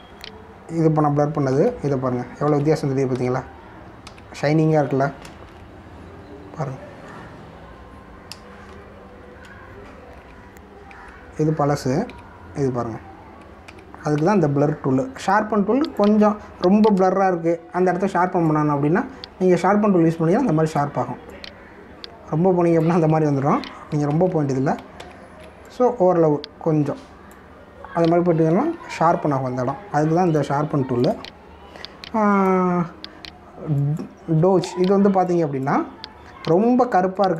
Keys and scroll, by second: 2.5 ctrl+z, 6.1 ctrl+-, 9.5 ctrl+=, 10.0 ctrl+-, 11.8 ctrl+z, 14.6 ctrl+z, 18.1 ctrl+=, 25.1 ctrl+alt+z, 29.5 ctrl+z, 35.5 space.